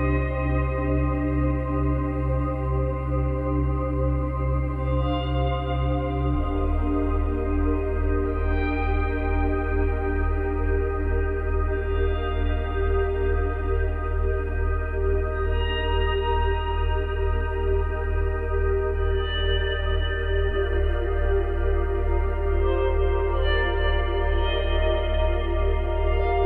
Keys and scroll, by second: 16.4 ctrl+z, 17.5 ctrl+z, 23.0 space.